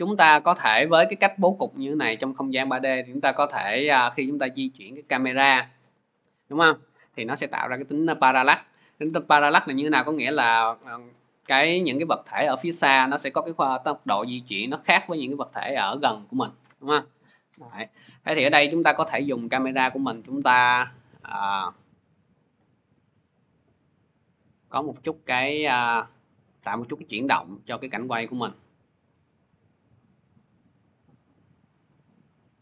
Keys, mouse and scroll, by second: 3.0 click, 6.0 p, 6.9 click, 10.0 click, 16.5 click, 29.0 shift+click, 31.0 click.